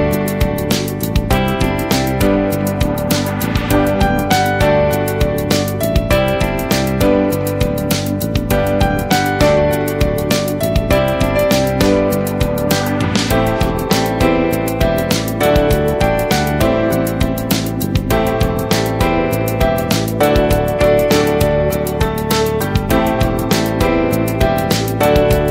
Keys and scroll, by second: 1.6 ctrl+Return, 2.4 ctrl+-, 3.5 space, 7.0 ctrl+Return, 8.5 space, 9.2 ctrl+space, 11.2 ctrl+z, 12.3 ctrl+s, 17.4 ctrl+space, 17.9 ctrl+space, 18.1 ctrl+space, 25.3 ctrl+space.